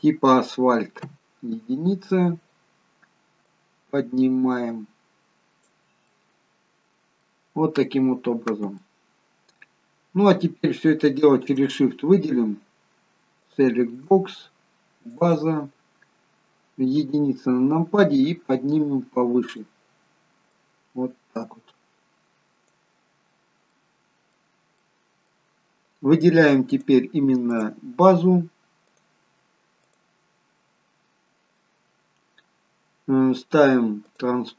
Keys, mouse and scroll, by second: 1.0 KP_1, 2.1-3.2 scroll up 2, 3.4 click, 3.4 scroll up 1, 6.1 middle click, 8.7 middle click, 11.0 shift+click, 13.4 click, 15.2 shift+click, 17.0 KP_1, 19.5 click, 20.6 click, 23.3-24.8 scroll up 2, 23.7 middle click, 24.8 middle click, 26.7 click, 27.5 click, 29.9 click, 34.1 click.